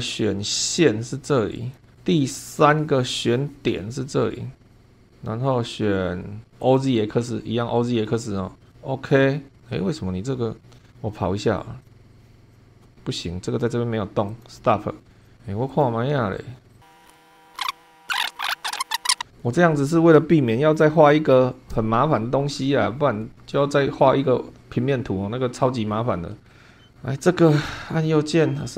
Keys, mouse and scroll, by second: 1.5 click, 2.6 click, 3.3 scroll up 1, 4.7 click, 6.6 click, 8.7 click, 11.8 click, 12.1 click, 12.5 click, 14.3 click, 15.2 click, 15.7 click, 16.7 click, 17.1 shift+middle click, 17.4 scroll down 2, 17.5 click, 19.1 scroll up 2, 26.5 click, 27.5 right click.